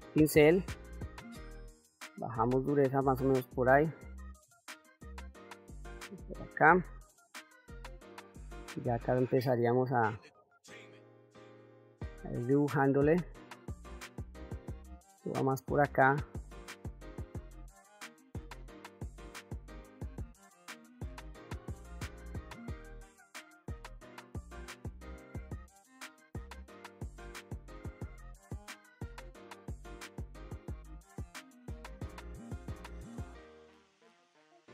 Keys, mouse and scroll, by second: 1.2-3.7 shift+f, 7.1-9.6 drag, 9.9-11.6 drag, 12.1 click, 12.6 click, 13.9 click, 14.5 click, 15.3 click, 15.8-17.5 drag, 17.5 middle click, 17.8 middle click, 18.0 click, 19.2 click, 19.5 click, 20.0 middle click, 20.1 click, 20.8 shift+middle click, 21.0-22.3 drag, 22.4 middle click, 22.7 click, 23.0 f, 23.4 click, 24.0 middle click, 24.2 click, 24.9 shift+middle click, 25.1 click, 25.8 click, 26.1 click, 26.4 shift+middle click, 26.7 click, 26.9 middle click, 27.1 ctrl+middle click, 27.3 ctrl+middle click, 27.5 f, 27.8 click, 28.4 f, 28.6-29.8 drag, 31.0 shift+middle click, 31.3 ctrl+s, 31.5 f, 31.9 click, 32.7 middle click, 32.9 shift+middle click, 33.1 f, 33.3 click, 33.8 click.